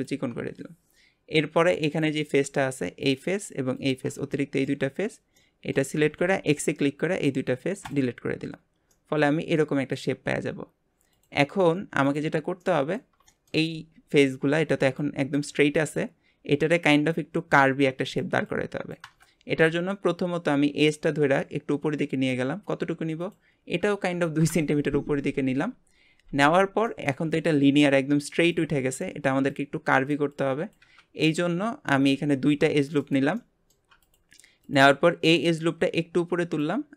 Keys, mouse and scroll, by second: 1.5-3.1 drag, 3.7 shift+click, 4.3 middle click, 5.0-5.3 scroll up 1, 5.3 middle click, 6.0 x, 8.9-11.1 middle drag, 11.1-12.1 drag, 12.6-13.7 middle drag, 13.7 scroll down 1, 19.6-21.3 middle drag, 21.3 click, 23.2-26.4 drag, 26.9-31.1 middle drag, 31.2-31.7 scroll up 1, 31.7-32.1 scroll up 1, 32.1 ctrl+r, 33.4 shift+middle click, 34.0 click, 34.6 click, 35.4 click.